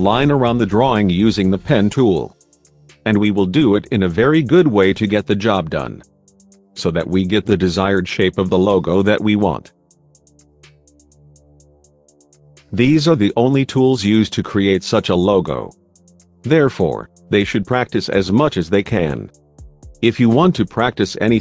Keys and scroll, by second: 2.6 space, 10.8 space, 19.5 space, 20.9 space.